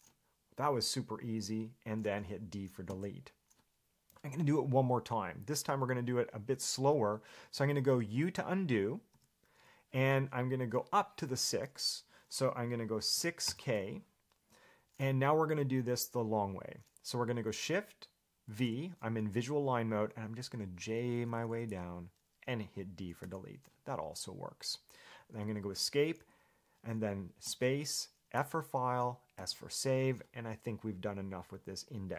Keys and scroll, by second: 3.1 d, 9.3 u, 13.3 6, 13.7 k, 18.7 shift+v, 21.0-21.9 typing, 23.4 d, 25.9 Escape.